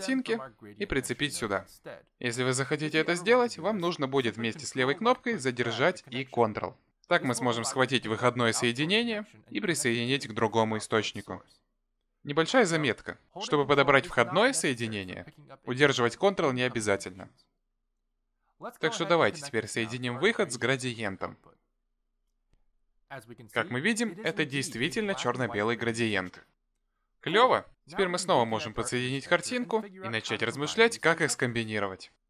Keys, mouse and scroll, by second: 7.0 ctrl+click, 12.2 ctrl+click, 15.4 click, 19.6 ctrl+click, 28.9 click.